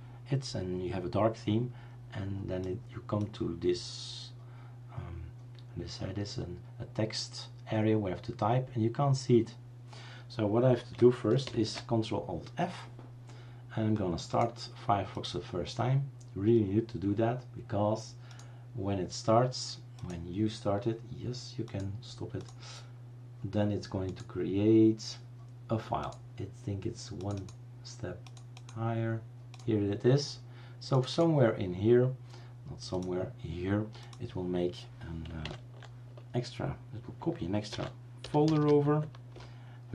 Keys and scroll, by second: 11.6 ctrl+alt+f, 37.8-39.1 typing, 39.3 Return.